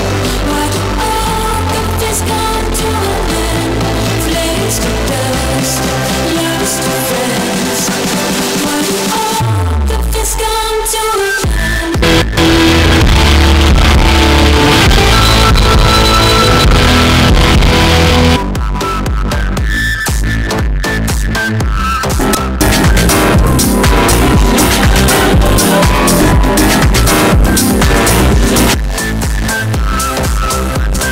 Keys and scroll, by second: 18.8 Page_Down, 28.8 Page_Down.